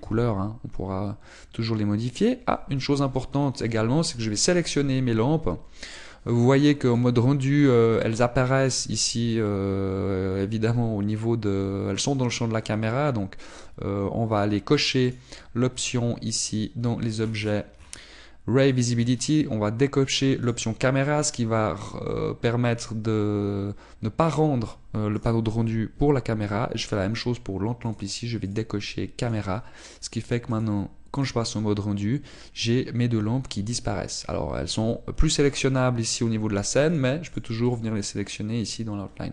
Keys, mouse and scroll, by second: 0.7 click, 1.1 g, 3.3 click, 4.4 scroll down 1, 5.1 right click, 8.0 click, 14.5 click, 16.1 right click, 21.5 click, 21.5-23.0 scroll down 11, 23.0 click, 26.2 right click, 29.5 click, 30.5 click, 31.6 click, 38.0 click, 38.4 click, 38.8 click, 39.2 click.